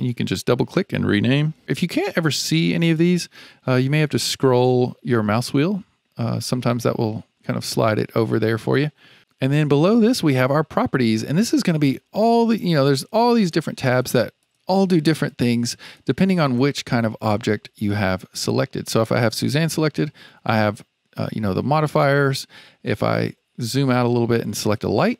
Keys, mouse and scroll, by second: 3.8-4.1 scroll down 4, 4.1-4.7 scroll up 1, 4.7-5.4 scroll up 2, 6.1-9.1 scroll down 1, 12.9 click, 13.4 click, 13.9 click, 14.4 click, 14.8 click, 15.2 click, 15.8 click, 16.4 click, 18.3 click, 22.9-23.5 scroll down 2, 23.5-24.6 scroll down 8, 24.6 click.